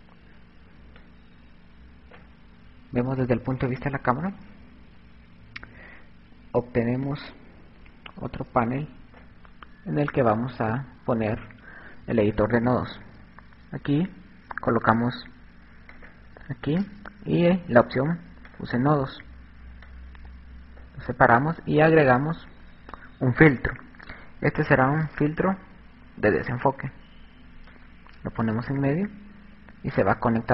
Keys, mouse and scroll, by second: 1.2 click, 5.3 click, 10.4 click, 15.4 click, 18.3 click, 20.1 click, 22.0 click, 27.9 click.